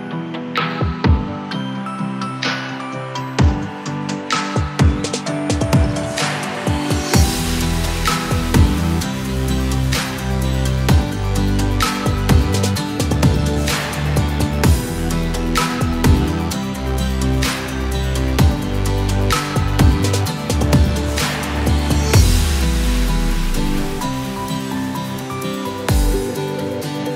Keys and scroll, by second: 2.0 [, 2.2 [.